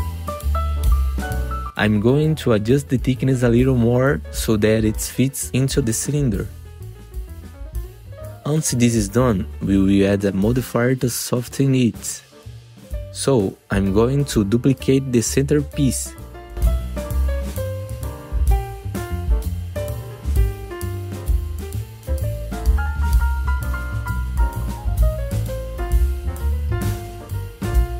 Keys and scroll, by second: 0.6 F3, 6.9 F3, 7.5 F4, 9.6 F4, 12.1 F4, 14.7 F4, 19.5 alt+q, 19.8 F4, 21.0 F4, 22.4 e, 24.7 F3, 25.8 F3, 26.7-27.5 typing.